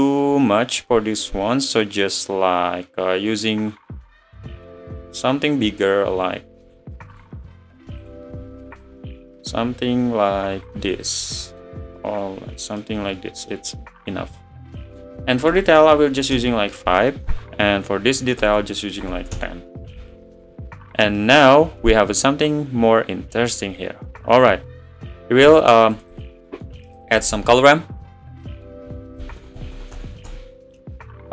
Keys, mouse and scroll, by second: 8.2-24.5 drag, 24.5 scroll down 1.